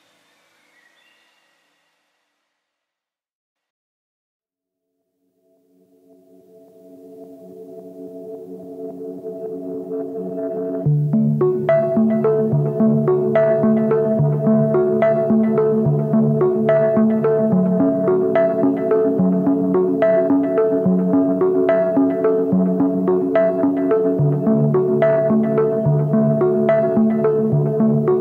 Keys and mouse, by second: 3.3 ctrl+z, 3.5 click, 4.2 click, 5.2 3, 6.3-6.8 shift+drag, 7.1 drag, 8.3 click, 9.6 s, 13.1-17.3 drag, 17.3-18.5 middle drag, 19.1-19.7 middle drag, 19.8 3, 20.9 z, 21.4 click, 21.7 click, 24.0 z, 24.4 click, 26.3-28.2 drag.